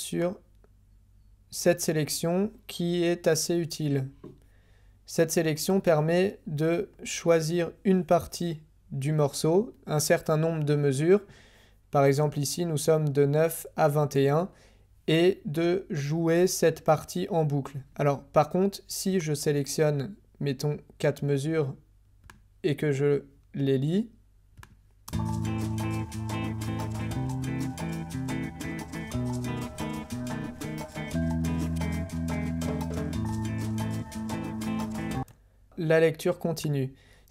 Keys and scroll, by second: 25.1 [, 35.2 space.